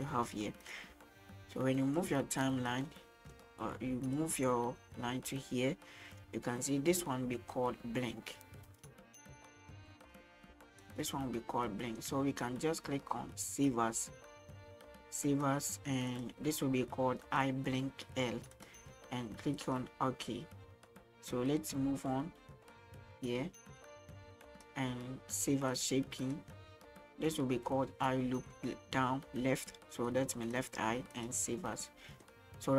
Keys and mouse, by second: 2.1-2.8 drag, 3.2 middle click, 4.2-10.9 drag, 11.4-12.0 shift+middle drag, 15.3-19.8 drag, 21.4-24.8 drag, 25.8-31.3 drag, 31.9 middle click.